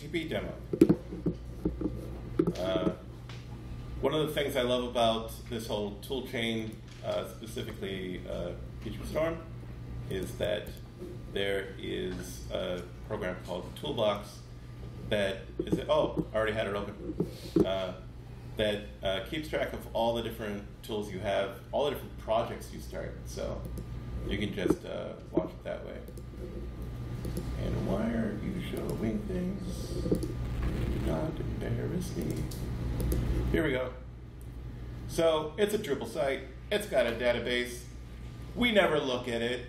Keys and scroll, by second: 10.2-11.2 typing.